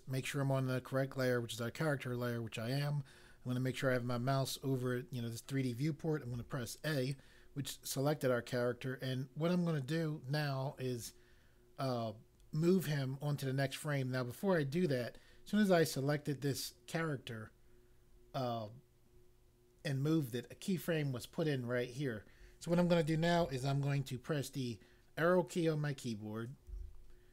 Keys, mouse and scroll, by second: 6.3 a, 26.7 Right.